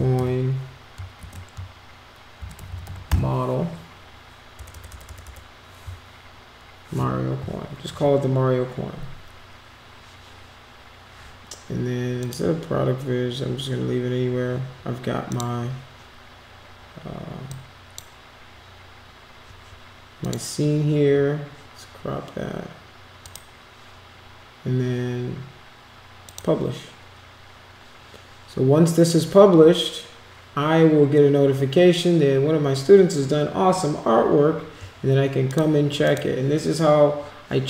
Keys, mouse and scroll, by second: 0.0-0.6 typing, 2.4 shift+m, 4.6 BackSpace, 5.1 BackSpace, 12.2 click, 15.2 click, 17.5 click, 20.2 click, 23.2 click, 26.2 click, 35.5 click, 36.0 click.